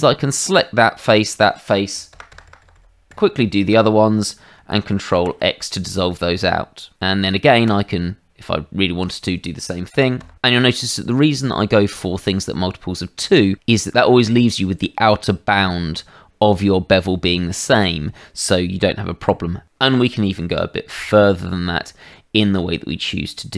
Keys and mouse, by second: 1.1 shift+click, 5.1 ctrl+x, 7.6 click, 9.0 shift+click, 21.8 middle click, 22.6 shift+middle click.